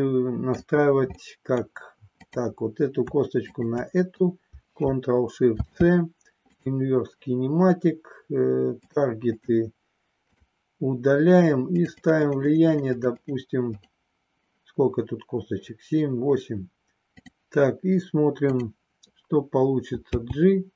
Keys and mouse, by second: 1.1 middle click, 2.1 click, 3.4 shift+click, 5.4 ctrl+shift+c, 8.8 click, 11.8 click, 12.0 click, 12.3 click, 12.7 click, 13.3 click, 13.7 click, 17.0 click, 20.2 g.